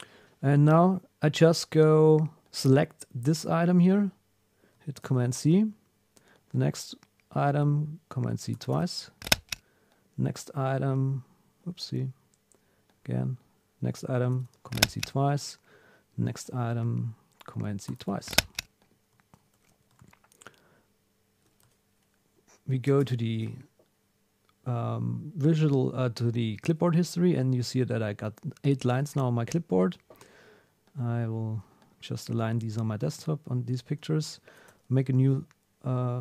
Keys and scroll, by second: 5.0 super+c, 8.5 super+c, 14.3 super+c, 17.9 super+c, 20.0 super+Tab, 23.2 alt+super+\, 33.1 super+Tab, 34.7 super+n.